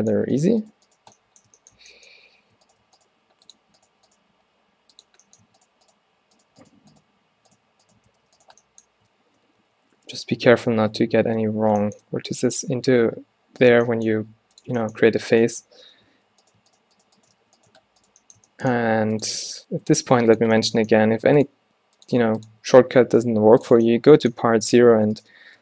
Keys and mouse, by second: 0.8 shift+Tab, 2.9 f, 3.2 g, 4.1 g, 4.4 g, 8.2 f, 9.5 ctrl+z, 9.7 ctrl+z, 10.4 z, 11.8 b, 12.6 z, 13.1 f, 13.8-15.4 drag, 14.3 g, 16.2 alt+w, 17.5 f, 18.9 g, 19.4 r, 20.0 g, 21.1 r, 21.7 s, 22.2 g, 23.3 s.